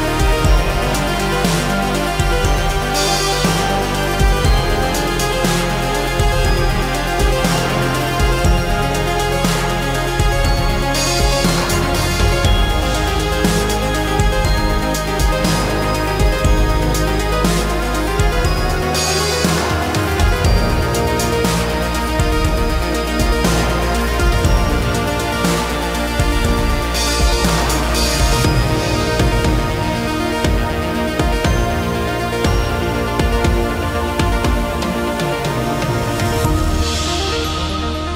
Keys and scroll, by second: 3.3 Delete, 4.4 space, 4.4 Escape, 5.0 space, 5.0 Escape, 5.4 space, 5.6 Escape, 15.3 shift+space, 15.5 Escape, 20.2 m, 22.3 space, 29.5 space, 35.6 space, 36.4 s.